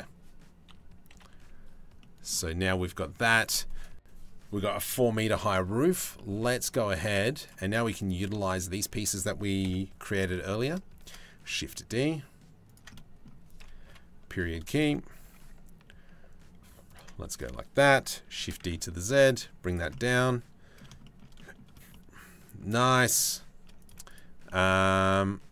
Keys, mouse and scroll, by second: 0.3 KP_3, 0.7 KP_1, 1.6 middle click, 2.3 middle click, 5.7 middle click, 7.0 shift+click, 8.1 shift+click, 9.2 KP_7, 10.6 shift+d, 13.4 KP_Decimal, 14.7 g, 16.9 click, 18.0 shift+d, 19.5 click, 21.0-22.2 drag, 22.5 click, 24.0-25.5 shift+drag.